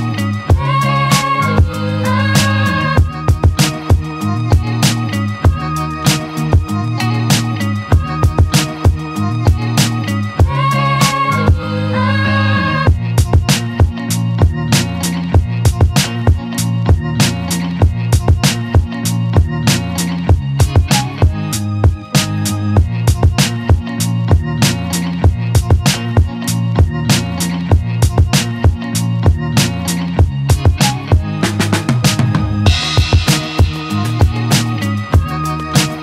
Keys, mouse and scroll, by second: 0.2 alt+click, 0.7 z, 1.3-2.7 alt+right drag, 2.7-5.4 drag, 5.4 z, 7.1 alt+click, 7.6-7.9 alt+middle drag, 7.9 Tab, 8.5 Tab, 9.8 click, 10.8 click, 11.2-12.0 right drag, 12.0 Tab, 12.4-14.2 alt+drag, 15.0 click, 15.2-15.6 alt+right drag, 15.6-17.4 alt+drag, 19.1 click, 19.5 click, 20.1 click, 20.9 click, 21.7 Tab, 22.2 alt+right click, 22.5-24.3 alt+drag, 26.1 click, 26.8 click, 28.3 scroll up 2, 28.6 alt+middle click, 29.3 z, 30.3 1, 30.7 click, 31.3 click, 32.1 shift+click, 33.1 scroll up 3, 33.9 shift+click, 34.4 scroll down 1, 34.8 alt+middle click, 35.0 scroll up 1, 35.5 shift+click.